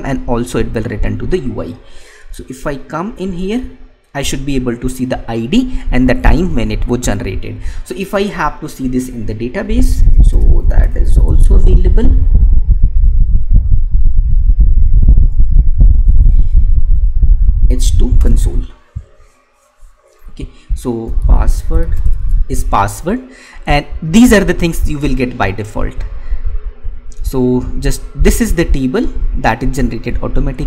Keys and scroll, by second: 2.9 alt+Tab, 12.2 Right, 17.9 Down.